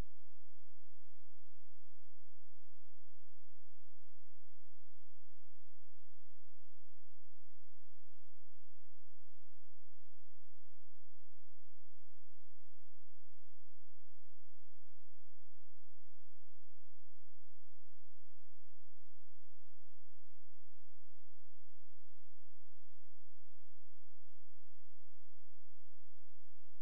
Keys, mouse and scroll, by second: 4.2 click, 7.4 space, 8.1 click, 11.3-11.9 scroll down 1, 11.9-12.7 scroll up 1, 13.4 click, 16.0 click.